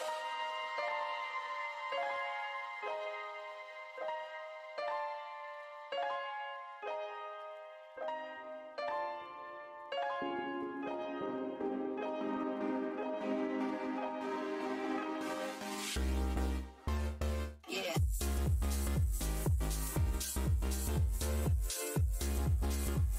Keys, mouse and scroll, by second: 0.4 e, 0.9 s, 2.8 e, 3.3 click, 4.0 w, 4.6 shift+v, 5.6 alt+click, 5.9 shift+x, 8.3-8.8 scroll up 1, 10.3 click, 12.0 v, 13.4 click, 14.9-15.9 scroll down 1, 15.9 space, 16.5 alt+click, 17.5 alt+scroll up 1, 18.4 right click, 19.4 alt+click, 20.9 w, 21.2 shift+v, 22.4 alt+click.